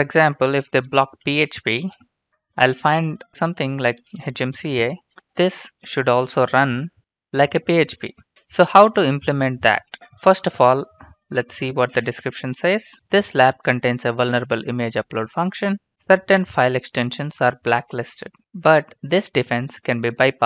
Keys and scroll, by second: 0.2-4.7 typing, 10.0 alt+Tab.